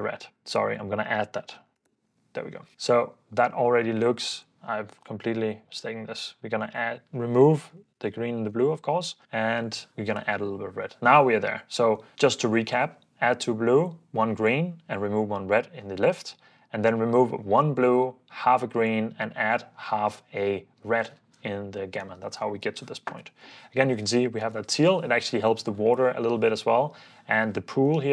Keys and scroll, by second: 0.3 super+b, 0.5 super+d, 1.3-2.2 typing, 2.7 super+d, 4.7-5.9 typing, 7.3-8.4 typing, 8.8 super+d, 9.2 super+d, 22.0 super+d, 22.4 super+d, 23.1 super+s, 23.8 super+f, 24.6 super+d, 28.0 super+d.